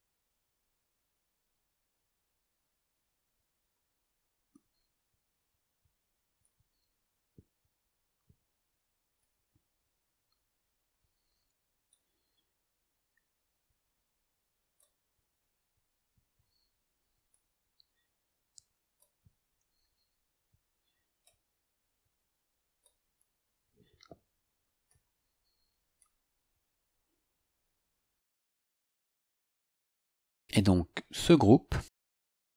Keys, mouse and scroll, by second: 1.6-3.9 drag, 5.4 click, 6.5 click, 7.4-9.3 drag, 10.9 click, 11.9-14.9 drag, 16.4 click, 17.3-19.1 drag, 20.4 click, 21.3-23.0 drag, 24.9 click, 26.0-29.0 drag, 31.5 click.